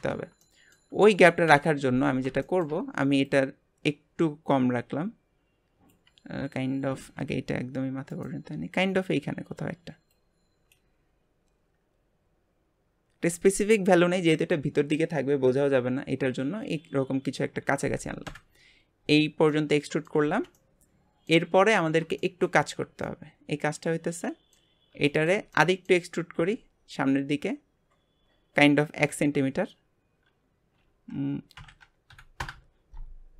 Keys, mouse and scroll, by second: 0.5 middle click, 1.4 KP_3, 2.1-2.4 scroll down 1, 2.4 shift+middle click, 3.2 click, 6.9 g, 8.7-10.1 scroll up 2, 10.1 click, 18.2 KP_Divide, 19.5 middle click, 20.2 alt+z, 20.5-21.7 middle drag, 21.7-22.2 scroll up 1, 22.2-26.3 shift+middle drag, 26.3 e.